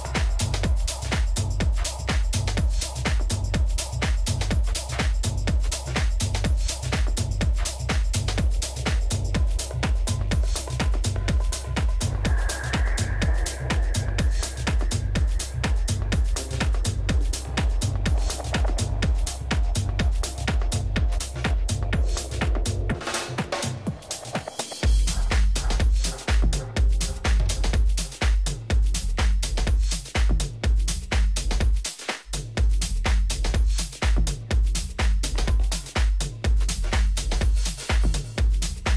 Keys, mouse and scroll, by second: 0.1 g, 3.7 a, 5.0 b, 6.8 g, 10.4 a, 11.6-12.9 middle drag, 12.9 a, 13.2-14.5 middle drag, 16.3 a, 17.9 b, 19.8 g, 22.7 a, 23.6-27.3 middle drag, 25.4 a, 26.0 a, 27.3 b, 29.3 g, 31.9 a, 33.0 b, 34.6 g.